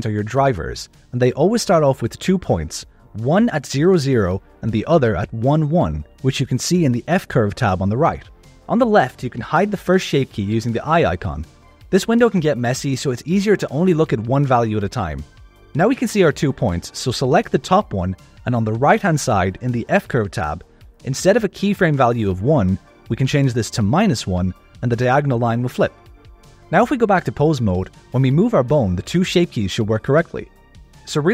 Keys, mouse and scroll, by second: 0.4 click, 4.1 click, 12.1 click, 18.1 click, 23.4-26.3 drag, 26.7 click, 27.2 click, 28.4 click, 28.9 g.